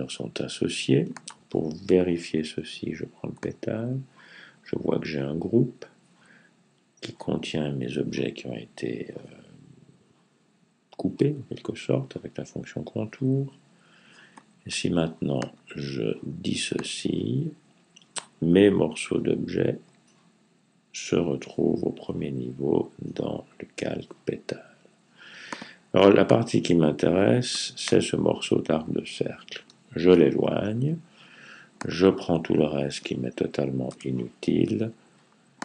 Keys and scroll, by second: 29.4 Right.